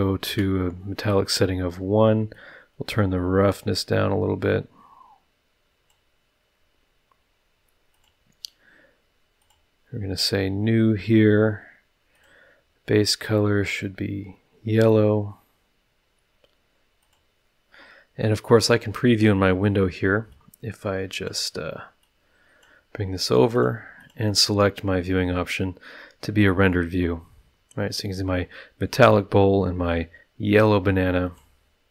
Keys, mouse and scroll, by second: 0.2 KP_Enter, 2.3-6.1 drag, 7.9 click, 9.4 click, 12.1 click, 13.6 click, 17.0 click, 20.3 click, 22.0 click, 23.5 click, 24.0 click, 31.2 click.